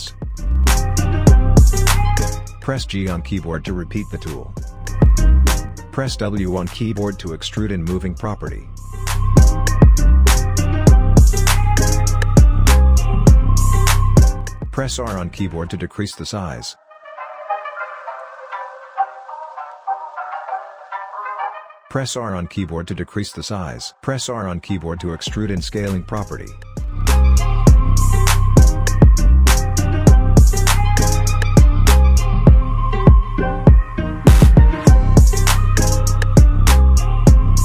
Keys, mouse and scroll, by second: 1.7-4.1 alt+drag, 4.1 g, 7.5 r, 8.5 w, 10.2-14.4 drag, 14.7-15.0 scroll up 1, 15.1 alt+click, 16.2 r, 17.2-22.6 drag, 22.6 g, 24.0 r, 25.0-28.1 drag, 28.1-29.0 scroll up 1, 29.1 alt+middle click, 30.1-30.6 scroll up 1, 30.6 alt+click, 31.3 alt+middle click, 32.8-35.4 drag, 35.7-36.4 scroll down 2, 36.4-36.9 scroll down 1, 36.9-37.6 right drag.